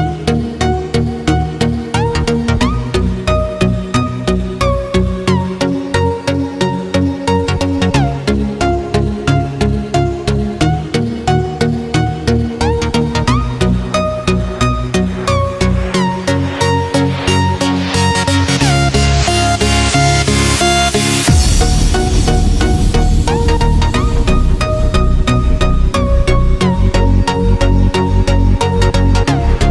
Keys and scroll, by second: 1.7 Escape, 5.1 Escape, 13.2 ctrl+space, 13.5 ctrl+space, 14.2 x, 18.6 space, 18.9 space, 19.2 x, 21.1 9, 24.0 x, 24.5 space, 28.1 z, 28.9 z.